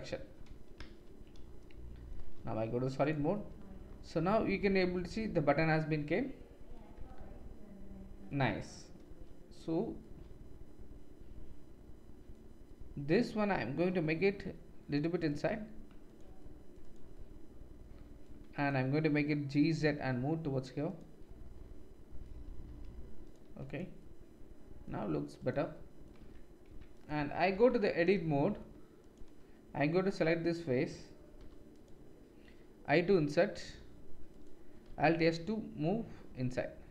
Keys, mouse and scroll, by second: 0.8 z, 3.0 click, 8.6 click, 13.9 g, 16.1-16.9 drag, 18.6 click, 19.6 g, 20.6-21.9 middle drag, 22.5 g, 25.4 click, 26.2 Tab, 26.7 Tab, 27.0-28.5 drag, 29.0 click, 31.4 3, 34.9 alt+s.